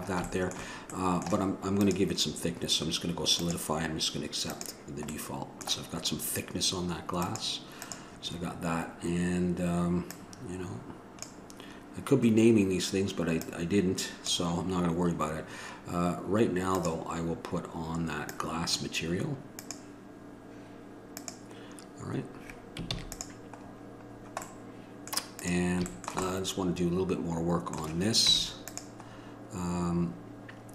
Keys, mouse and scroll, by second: 3.7-5.3 drag, 5.3-7.4 middle drag, 7.4-23.1 drag, 23.1 ctrl+s, 25.6-28.4 drag, 28.4 Tab.